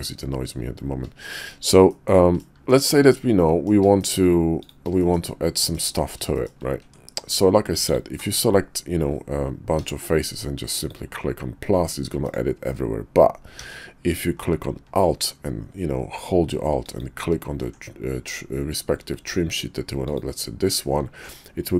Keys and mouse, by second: 1.3 shift+middle click, 1.9 middle click, 2.7 shift+middle click, 3.1-3.6 middle drag, 4.0 shift+middle click, 4.6 click, 5.0 shift+middle drag, 5.6 middle click, 6.3 shift+middle click, 6.8 Tab, 9.7 d, 13.6 d.